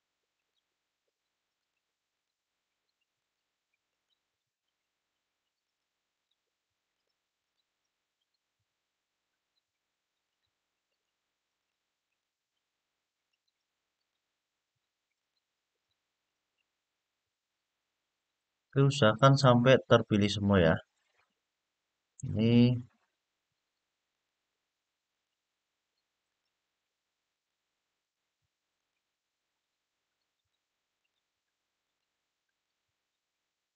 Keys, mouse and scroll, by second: 0.1 alt+shift+click, 1.3 alt+shift+click, 1.8 alt+shift+click, 2.9 alt+shift+click, 3.6 alt+shift+click, 5.4 alt+shift+click, 5.9 alt+shift+click, 6.6 alt+shift+click, 7.1 alt+shift+click, 10.0 alt+shift+click, 10.6 alt+shift+click, 11.3 alt+shift+click, 11.8 alt+shift+click, 13.0 alt+shift+click, 13.7 alt+shift+click, 14.9 alt+shift+click, 15.5 alt+shift+click, 16.6-17.4 scroll down 3, 19.1-21.9 middle drag, 22.6-23.4 scroll up 3, 23.9 alt+shift+click, 24.9 alt+shift+click, 26.0 alt+shift+click, 27.1 alt+shift+click, 27.8 alt+shift+click, 28.5 alt+shift+click, 30.1 alt+shift+click, 30.7 alt+shift+click, 31.6 alt+shift+click, 32.2 alt+shift+click.